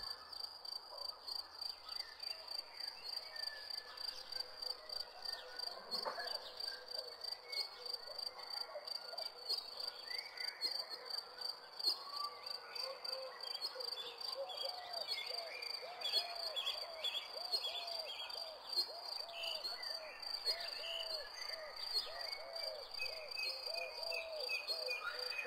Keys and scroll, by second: 0.0-0.5 typing, 5.5 c, 6.5 w, 11.6 d, 14.6 a.